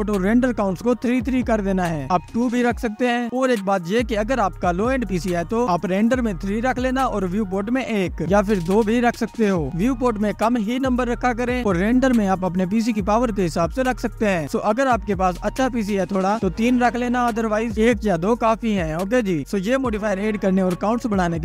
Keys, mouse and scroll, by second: 0.0-3.0 drag, 4.6-9.9 drag, 13.4-13.8 scroll down 1, 13.8-14.8 scroll up 1, 14.8-15.6 scroll down 1, 15.6 ctrl+s, 16.8 click, 19.3 click, 20.5-21.2 scroll up 1.